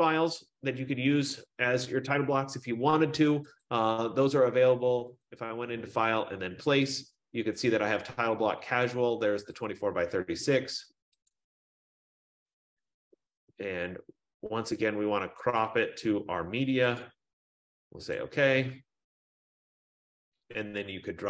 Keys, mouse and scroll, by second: 3.7 click, 5.3 click, 9.8 click, 11.6 click, 16.0 click, 17.3 click, 18.3 click.